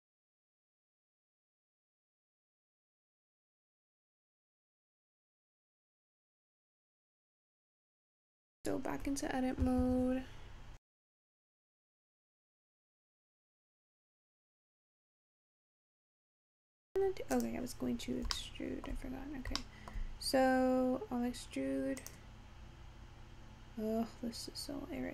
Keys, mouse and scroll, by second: 7.6-10.6 scroll down 1, 17.5 click, 18.5 shift+middle click, 19.2-19.7 scroll up 3, 19.7-22.1 shift+middle drag, 22.1 click, 23.1-24.2 scroll up 2, 24.2-25.1 scroll down 1.